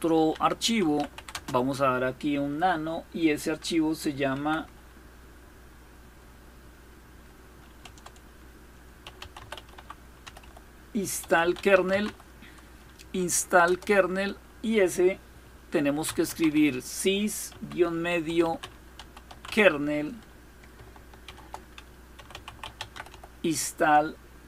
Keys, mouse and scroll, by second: 0.0-1.3 typing, 4.0 typing, 7.5-12.1 typing, 13.2 Return, 15.4-19.5 typing, 20.9-24.4 typing.